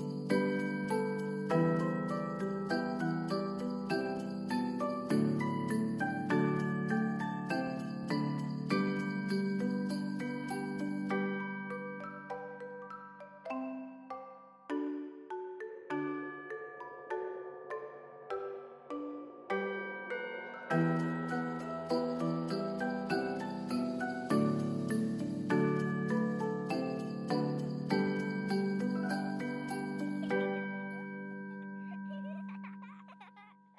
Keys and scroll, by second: 7.3 1, 7.8 Return, 15.8 space, 18.3 space, 24.8 space, 27.3 space, 27.6 ctrl+s, 30.5 space, 32.0 ctrl+s.